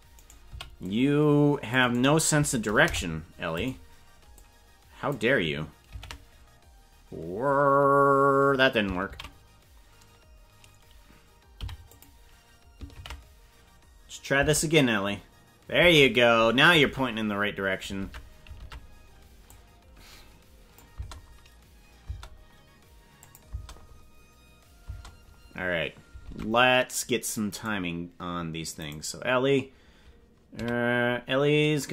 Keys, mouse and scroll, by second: 0.1 right click, 0.4 c, 2.8 Delete, 4.4 click, 5.8 ctrl+v, 9.1 ctrl+z, 11.6 i, 13.0 ctrl+v, 14.4 space, 15.8 space, 16.8 ctrl+Tab, 18.1 ctrl+Tab, 18.6 ctrl+Tab, 19.5-20.8 drag, 20.9 space, 22.1 space, 23.2 click, 23.4 space, 24.9 space, 26.2 ctrl+Tab, 27.5 right click, 28.9 right click, 30.5 a.